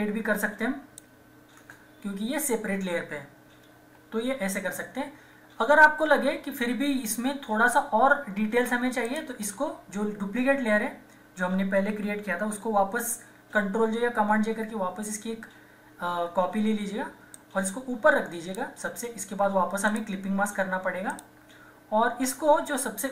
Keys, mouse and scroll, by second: 1.6 Return, 3.6 ctrl+=, 9.0 click, 12.2 click, 14.1 ctrl+j, 14.6 typing, 17.3-19.9 drag.